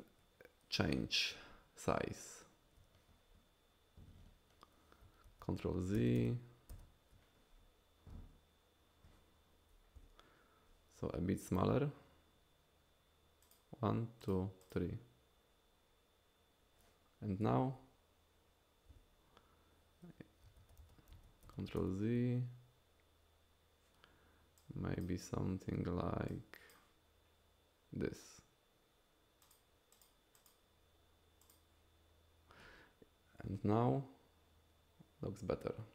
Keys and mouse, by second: 5.3 ctrl+z, 6.0 ctrl+z, 6.2 ctrl+z, 6.7 ctrl+z, 13.5 click, 14.2 click, 14.7-15.7 drag, 17.6 KP_Divide, 20.6 ctrl+z, 20.8 ctrl+z, 21.1 ctrl+z, 21.5 ctrl+z, 21.8 ctrl+z, 24.6 click, 26.3 click, 29.4 click, 30.0 click, 30.4 click, 31.4 click.